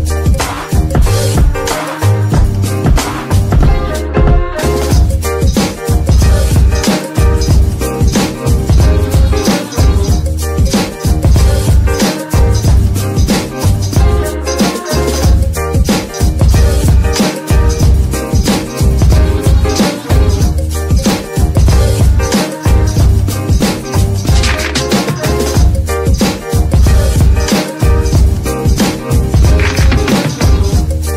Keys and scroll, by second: 0.1-1.3 typing, 2.7-4.5 typing, 4.7 Return, 6.4 g, 7.5 Tab, 8.4 shift+s, 9.4 Tab, 9.9 z, 10.8 g, 11.8 shift+s, 12.7 z, 15.5 KP_9, 15.7 Return, 19.3 z, 20.8 KP_9, 20.9 KP_0, 21.1 Return, 22.5 ctrl+KP_0, 22.6 Return, 23.9 KP_9, 24.1 KP_0, 24.3 Return, 25.6 KP_0, 25.8 Return, 27.9 g.